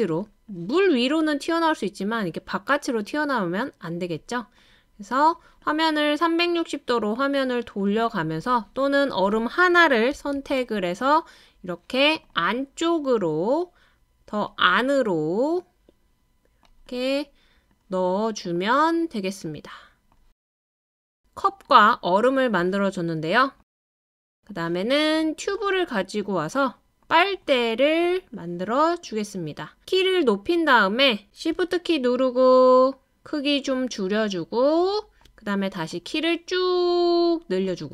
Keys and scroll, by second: 10.1 Left, 10.4 Left, 10.6 Down.